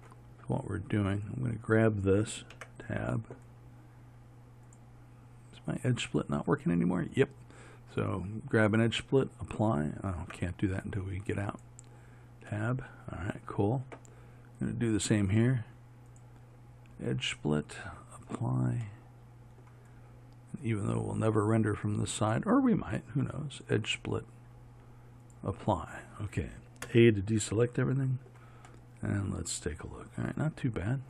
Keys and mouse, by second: 1.3-2.6 right drag, 2.6 Tab, 6.3-10.4 right drag, 10.4 Tab, 14.8-17.5 right drag, 17.5-19.1 drag, 19.1-20.8 middle drag, 20.8-23.7 right drag, 23.7-27.0 drag, 27.0 a.